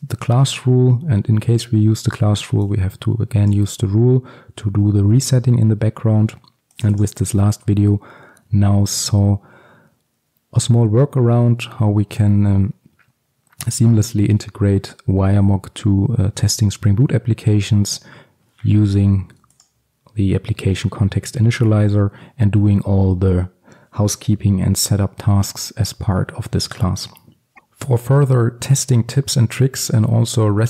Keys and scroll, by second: 19.7 ctrl+b.